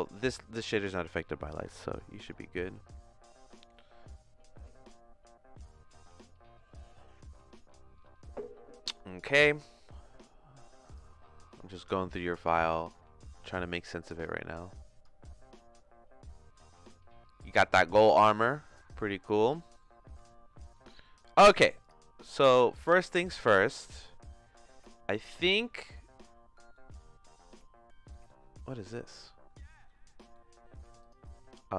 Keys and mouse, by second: 0.0 click, 0.3 click, 10.9 click, 12.3 click, 14.4 click, 17.6 middle click, 19.5 middle click, 20.8 middle click, 21.8 click, 23.6 shift+middle click, 24.8 click, 26.8 middle click, 28.2 middle click, 30.4 middle click.